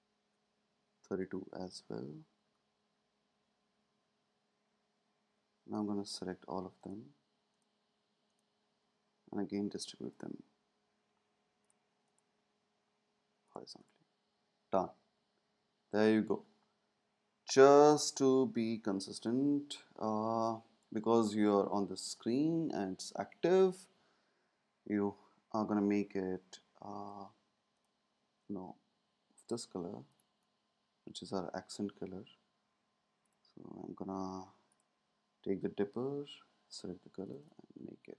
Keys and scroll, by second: 1.5 Left, 1.6 Left, 1.7-2.4 Left, 3.7 Right, 3.9 Right, 17.8 space, 19.1 space.